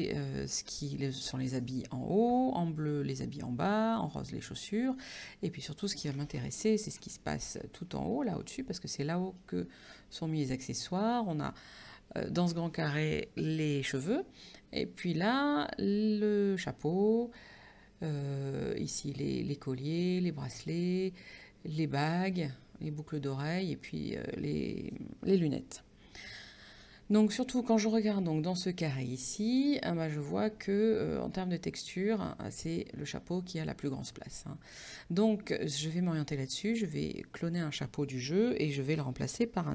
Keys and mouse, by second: 6.7 ctrl+=, 9.4 click, 29.6 click, 32.3 click.